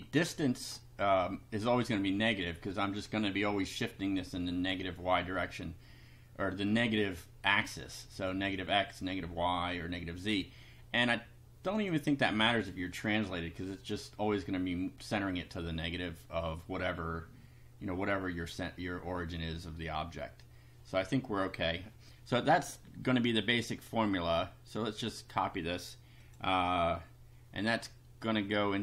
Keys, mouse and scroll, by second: 11.7 click, 23.9-25.3 drag, 26.2 click.